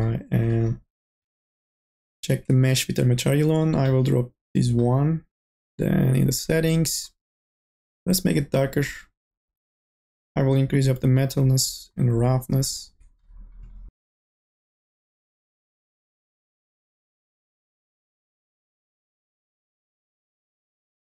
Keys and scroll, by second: 0.7-1.6 typing.